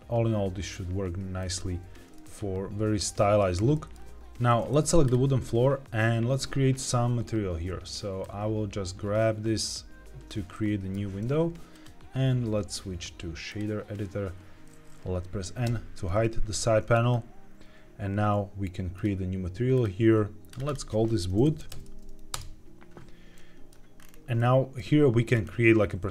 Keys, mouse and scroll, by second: 1.3-3.1 drag, 3.1-3.5 scroll up 1, 3.7 shift+middle click, 5.0 click, 8.1-10.2 drag, 10.4 shift+middle click, 11.6-13.5 drag, 16.9-17.3 scroll up 3, 18.9 click, 19.6 click, 20.4-22.3 drag, 21.5 o, 23.3 middle click, 23.9-24.3 scroll up 2, 24.3 middle click, 25.3-25.7 scroll up 2.